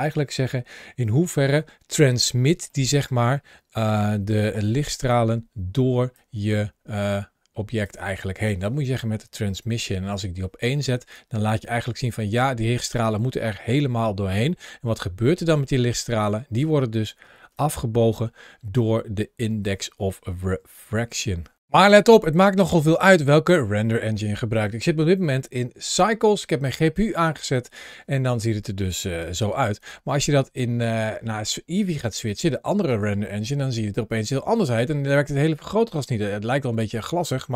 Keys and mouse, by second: 2.6 middle click, 4.4 ctrl+shift+a, 14.3-16.0 middle drag, 17.4-19.5 shift+drag, 20.4 g, 29.6 click, 29.9 g, 30.7 click, 31.6-33.0 drag, 33.7 g, 35.7 click, 36.1 middle click, 36.5 g, 37.0 click, 37.4 middle click.